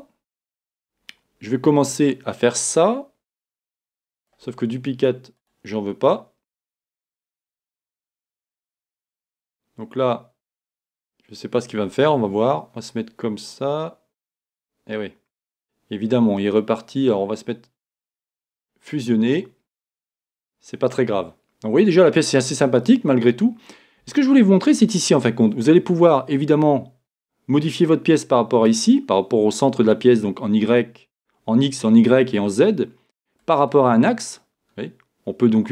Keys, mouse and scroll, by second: 1.9-4.3 drag, 5.4-8.2 drag, 9.2-18.6 drag, 20.0 middle click, 23.9-26.2 middle drag, 26.2-35.7 drag.